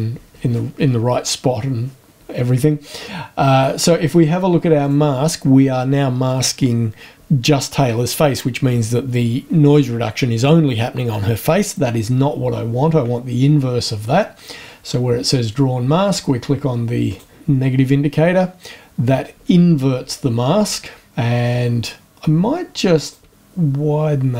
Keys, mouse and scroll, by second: 4.8 click, 17.1 click, 23.0 click, 23.2-24.0 shift+scroll up 1, 24.0-24.3 shift+scroll up 1, 24.3 shift+scroll down 1.